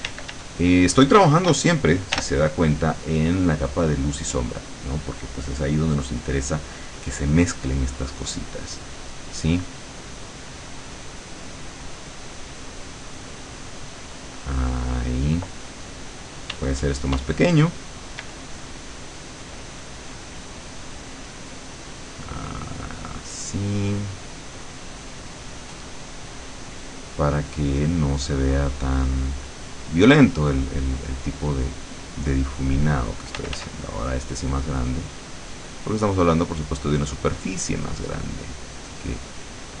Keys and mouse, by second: 0.2 d, 2.3 l, 4.7 click, 7.9-15.5 drag, 16.6 d, 17.5 click, 18.3 d, 18.9-30.1 drag, 30.7-33.5 drag, 33.5 f, 33.9-39.8 drag.